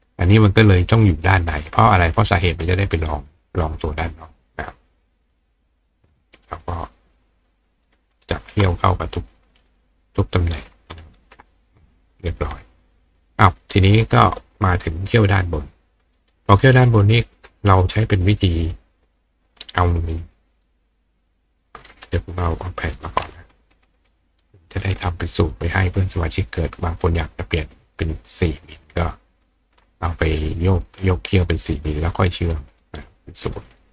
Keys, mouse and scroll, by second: 5.2 click, 5.9-6.5 drag, 7.5-9.8 drag, 7.9 ctrl+right click, 11.8 click, 15.0 click, 16.2 right click, 18.2 click, 20.0 click, 20.5 click, 21.1 click, 21.9 right click, 23.0 click, 25.3 click, 25.8 click, 27.6-29.4 ctrl+drag, 30.5 click, 32.2-33.9 drag.